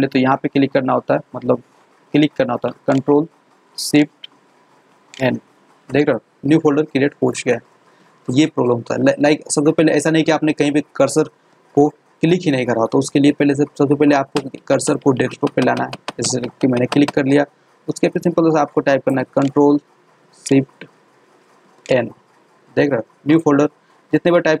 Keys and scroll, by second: 5.0 ctrl+shift+n, 21.8 ctrl+shift+n.